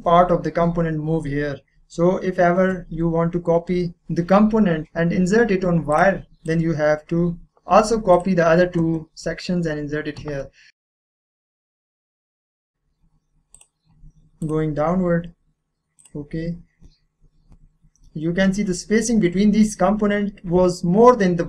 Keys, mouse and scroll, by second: 5.9 click, 8.2 click, 10.7 click, 12.0 click, 12.4-13.5 scroll up 1, 13.5 middle click, 13.7 click, 17.7-18.1 scroll down 1.